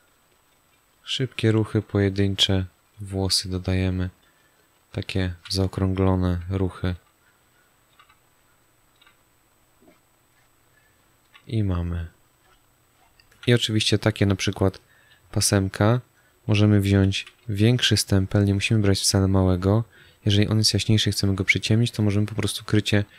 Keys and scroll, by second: 5.3 z, 6.3 space, 10.5 space, 13.3 z, 17.1 s.